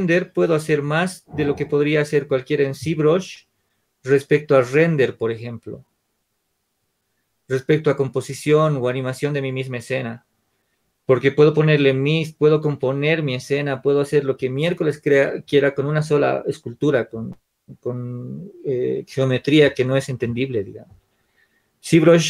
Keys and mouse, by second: 19.3-22.2 drag.